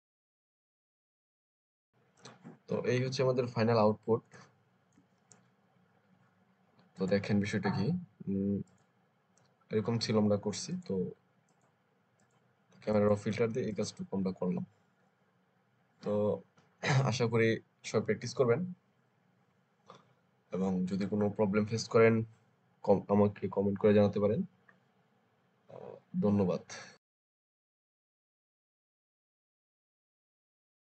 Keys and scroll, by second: 4.2 space.